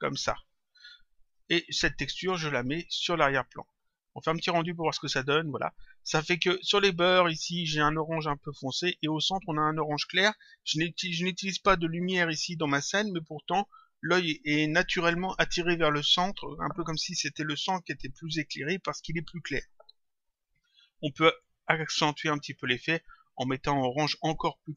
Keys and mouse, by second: 1.2 click, 2.6 click, 4.6 click.